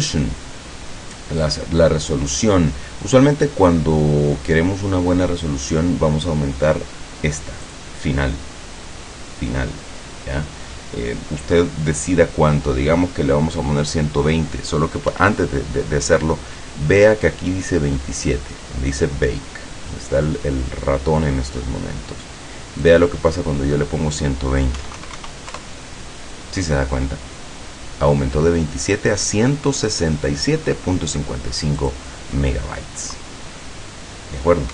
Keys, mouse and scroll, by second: 7.7 click, 15.2 Escape, 22.9 click, 24.9 KP_1, 25.1 KP_2, 25.3 KP_0, 25.6 KP_Enter, 31.9 click.